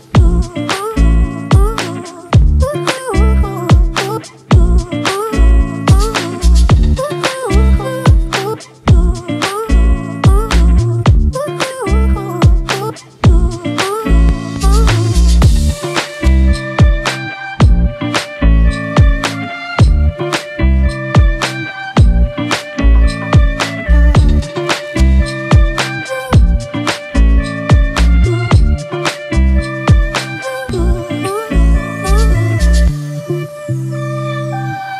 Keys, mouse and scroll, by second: 2.3-4.3 scroll down 1, 4.5-6.5 drag, 11.6-13.0 drag, 13.3-13.8 scroll down 4, 14.2 scroll up 3, 15.3-16.5 drag, 16.5 s, 18.2 click, 19.0 scroll up 2, 19.6-22.3 drag, 22.6 click, 23.1-31.3 drag, 31.3-32.0 scroll down 2, 32.0-33.3 drag, 34.4 s.